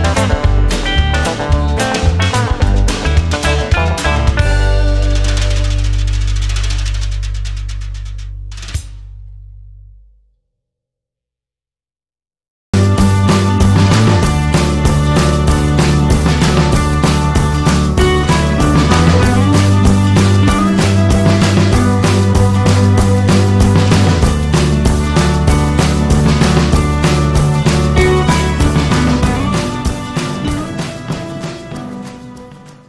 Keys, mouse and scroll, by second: 2.4 space, 4.5 right click, 5.4 right click, 8.3 right click, 9.4 right click, 19.8 right click, 23.1 right click, 24.3 right click, 27.0 space, 27.2 space, 27.5 space.